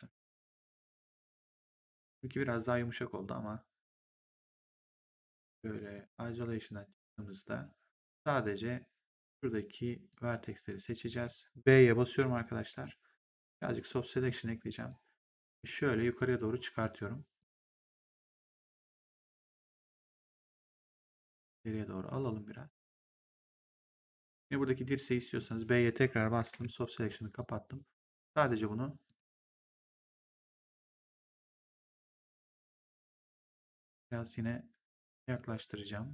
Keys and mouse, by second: 1.3 click, 2.9 click, 5.8 click, 8.1 right click, 9.2 click, 12.1 b, 12.7 middle click, 14.1 b, 14.8 click, 16.1 click, 17.3 click, 21.2 click, 25.3 click, 26.4 b, 27.3 click, 28.9 click, 31.2 click, 33.1 click.